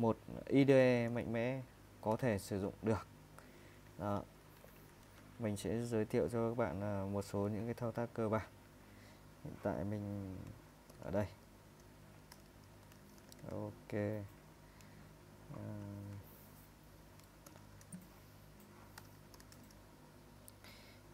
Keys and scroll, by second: 0.8-5.3 typing, 6.4 typing, 10.7-14.5 typing, 17.2-19.9 typing, 19.0 Return.